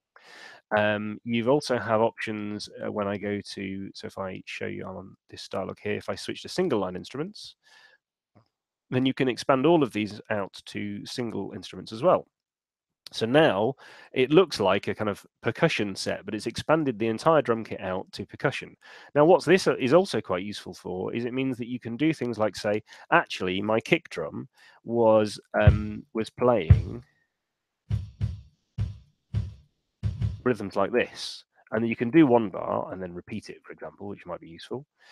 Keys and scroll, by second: 0.2 Escape, 24.7 6, 25.5 d, 27.3-30.2 typing, 31.1 Escape, 32.9 r.